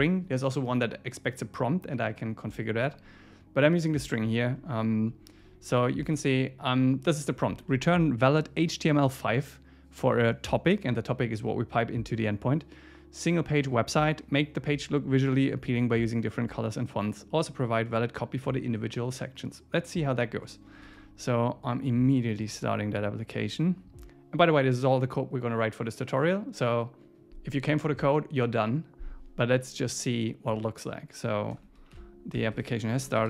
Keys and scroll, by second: 4.1 Down, 5.4 Up, 7.7 Left, 20.9 super+s, 32.3 F5, 32.7 ⟲.